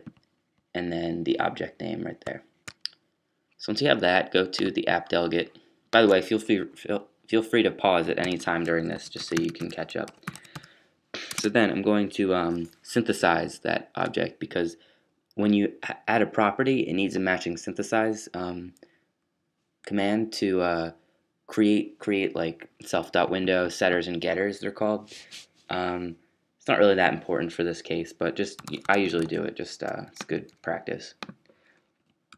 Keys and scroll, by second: 7.5 fn+Up, 8.1 shift+fn+Up, 8.2-13.8 typing, 16.3-17.0 typing, 28.5-29.2 typing, 31.9 fn+Up.